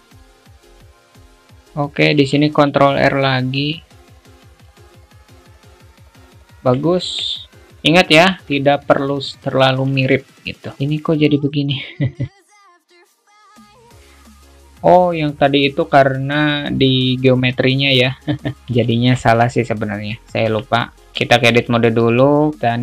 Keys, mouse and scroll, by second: 0.5 alt+shift+middle click, 0.9 click, 1.3 click, 2.5 ctrl+r, 4.8 a, 5.2 click, 5.9 click, 6.6 alt+z, 6.6-7.0 alt+middle drag, 7.3 Tab, 8.5-8.9 alt+middle drag, 11.7-12.3 drag, 12.5 ctrl+z, 12.7-13.1 alt+middle drag, 19.2 shift+middle click, 21.6 alt+shift+middle click.